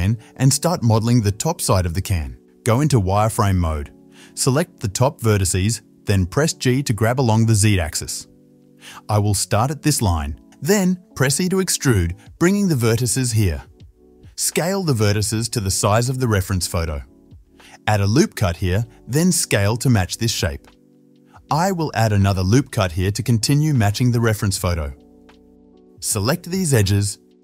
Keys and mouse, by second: 1.7-13.2 shift+middle drag, 3.6 1, 3.9 z, 5.0-15.8 drag, 5.0-13.2 right drag, 11.9 e, 13.7 s, 15.8-16.9 middle drag, 16.9 ctrl+r, 18.7 s, 20.5 ctrl+r, 22.2 s, 24.3-26.0 middle drag, 26.0 click, 26.1 shift+middle click, 26.6 alt+shift+click, 26.7-27.4 alt+shift+middle drag.